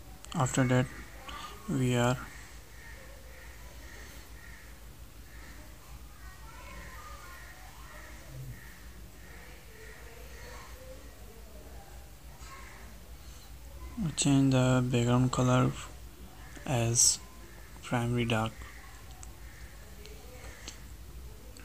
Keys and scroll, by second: 2.9 ctrl+shift+Right, 8.4 alt+Tab, 15.9 ctrl+Left.